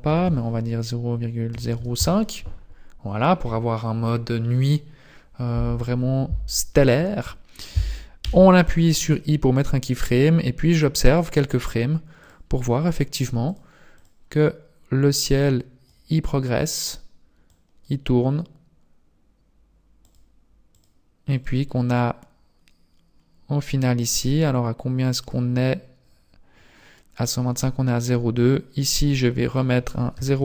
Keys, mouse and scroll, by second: 8.3 i, 10.1 click, 11.1 click, 12.2 click, 13.5 click, 14.0 click, 15.5 click, 17.6 click, 20.2 click, 20.7 click, 21.4 click, 21.8 click, 25.2 click, 28.6 click, 29.5 click.